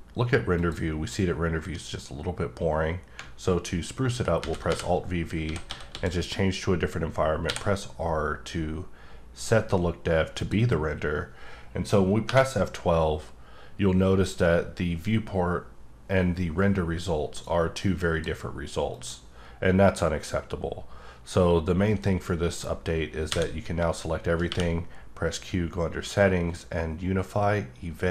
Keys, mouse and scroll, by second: 2.0 click, 4.4 alt+v, 5.4 typing, 7.4 r, 10.4 click, 12.3 F12, 14.1-14.5 scroll down 1, 14.5-16.6 scroll up 1, 17.4 click, 18.9 click, 19.6-21.7 scroll up 1, 23.3 a, 26.6 q.